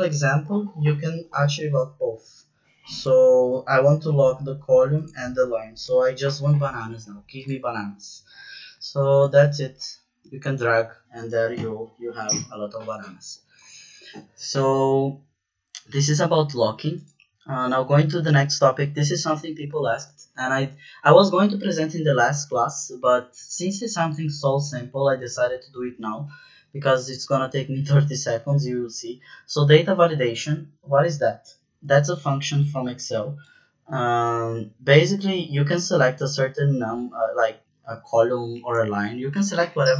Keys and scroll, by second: 5.2 shift+4, 5.8 Return.